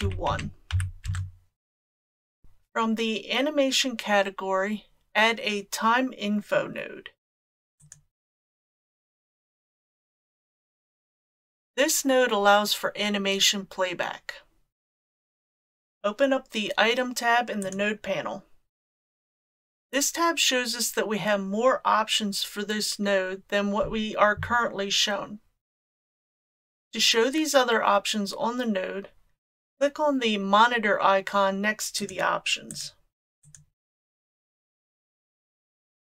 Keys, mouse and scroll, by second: 2.4 shift+a, 17.7 click, 32.0 click, 32.7 click, 33.5 click.